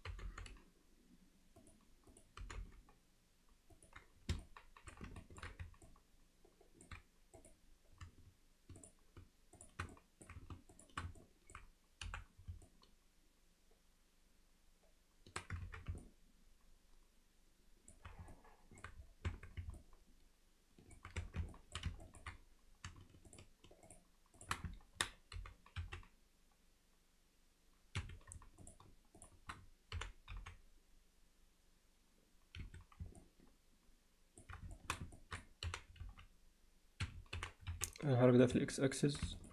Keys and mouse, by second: 0.1 g, 2.4 g, 4.4 alt+middle click, 5.2 ctrl+alt+middle click, 5.9-6.9 alt+middle drag, 9.6 shift+click, 9.9 alt+middle click, 10.7 shift+click, 11.2 alt+middle click, 12.1 f, 12.7-15.4 alt+middle drag, 15.7 ctrl+z, 16.0-17.9 alt+middle drag, 18.3 alt+middle click, 19.3 Tab, 19.8-21.0 middle drag, 21.2 Tab, 21.6 alt+middle click, 22.1 ctrl+middle click, 23.3 click, 23.9 click, 25.4 g, 29.2 shift+click, 30.0 g, 33.2-34.4 alt+middle drag, 34.8 alt+shift+middle click, 35.2 ctrl+alt+middle click, 37.4 g, 38.7 alt+middle click, 39.4 ctrl+alt+middle click.